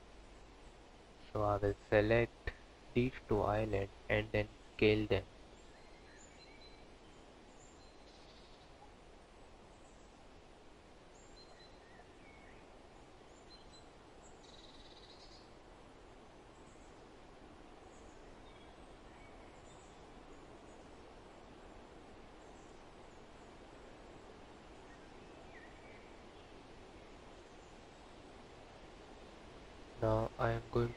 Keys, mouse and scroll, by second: 1.4 l, 4.6 s, 7.6 scroll down 3, 9.0 click, 9.3 l, 9.6 s, 12.2 click, 12.4 l, 12.9 g, 14.7 q, 15.5 Tab, 16.2 click, 16.6 click, 18.4 Tab, 19.8 click, 19.9 l, 21.1 s, 23.9 g, 24.6 click, 24.8 l, 25.1 g, 26.7 Tab, 27.5 click, 29.7 click, 30.1 Tab.